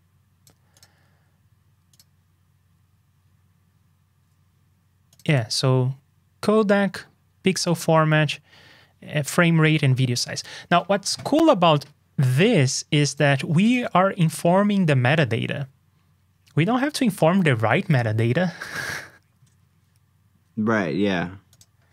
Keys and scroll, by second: 19.1 alt+shift+Down.